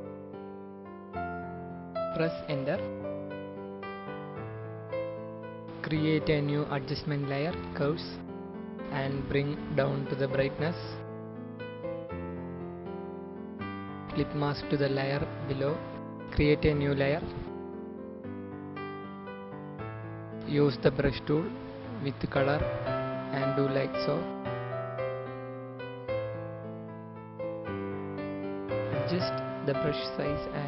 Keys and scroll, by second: 2.3 Return, 15.3 ctrl+alt+g, 26.3-29.5 typing, 30.3 ctrl+z.